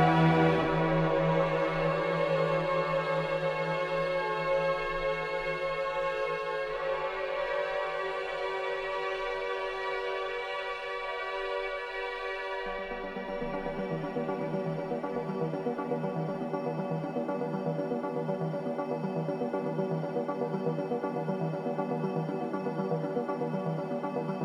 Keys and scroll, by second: 1.4 4, 1.7 3, 1.9 ], 7.2 ], 11.5 ctrl+z, 14.0 4, 20.0 3, 20.5 ], 21.4 4, 22.5 2.